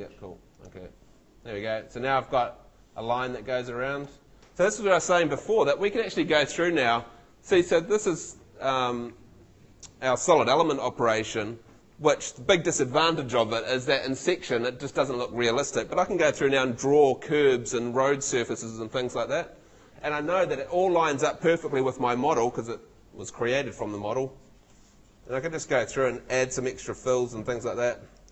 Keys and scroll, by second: 1.4 Escape.